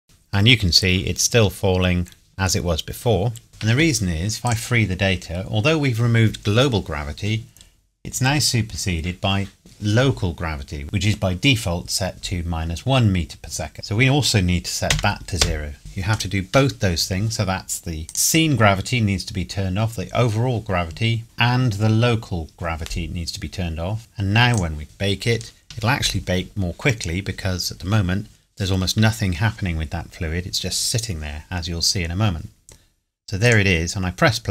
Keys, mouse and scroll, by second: 0.0 click, 1.3 scroll up 1, 1.7 scroll down 1, 3.5 click, 13.7 click, 14.9 KP_0, 15.4 KP_Enter, 18.1 click, 21.2 click, 24.5 click, 33.5 click.